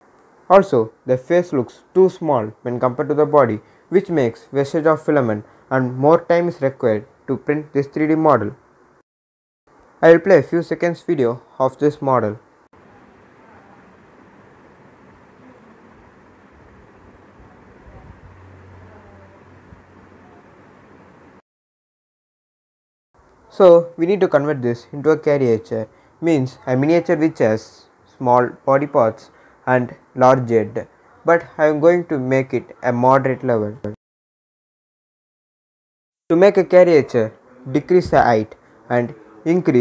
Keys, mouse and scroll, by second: 1.3 scroll down 1, 2.4-3.8 drag, 3.8 scroll up 1, 5.7-9.4 drag, 9.4 scroll up 1, 11.7 click, 21.4-24.6 drag, 24.6 scroll down 1, 32.2 click, 32.9 scroll down 1, 34.5-39.8 drag.